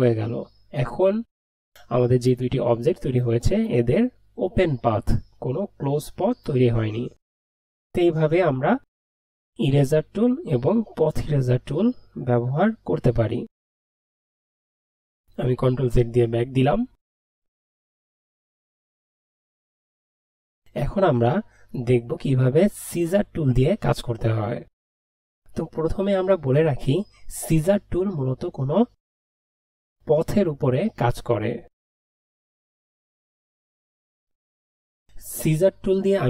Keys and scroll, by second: 16.0 ctrl+z.